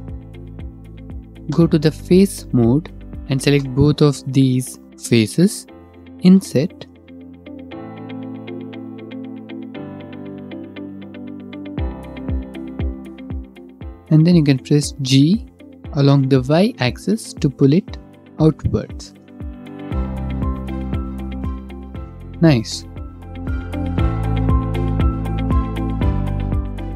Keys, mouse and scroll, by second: 1.3 3, 2.0 click, 3.1 click, 3.1 7, 3.6 1, 4.9 shift+middle click, 6.2 ctrl+z, 6.2-6.5 scroll, 12.8-13.8 shift+drag, 13.8 middle click, 14.9 middle click, 15.6 g, 16.9 y, 19.1 shift+click, 20.1 middle click, 20.1 Tab, 20.4 middle click, 20.8 middle click, 21.3 middle click, 22.0 shift+middle click, 22.5 shift+middle click, 22.7 middle click.